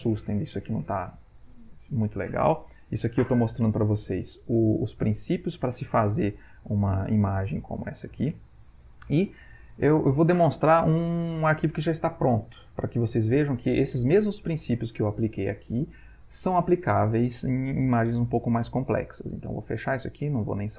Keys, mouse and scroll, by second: 19.4 click.